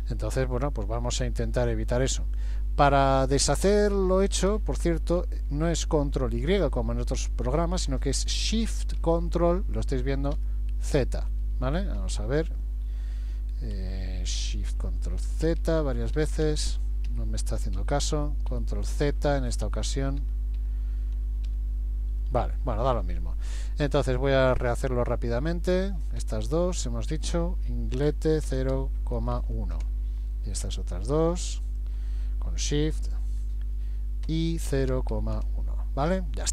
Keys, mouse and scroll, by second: 10.4 ctrl+shift+z, 11.0 ctrl+shift+z, 13.8 a, 14.8 a, 15.8 ctrl+shift+z, 16.2 ctrl+shift+z, 16.5 ctrl+shift+z, 17.1 Escape, 17.8 ctrl+z, 18.2 ctrl+z, 18.5 ctrl+z, 19.1 ctrl+z, 19.7 ctrl+z, 20.2 ctrl+z, 20.6 ctrl+z, 21.5 ctrl+z, 25.5 click, 26.0 click, 26.8 shift+click, 27.1 shift+click, 28.1 i, 30.6 click, 31.7 shift+click, 34.3 i.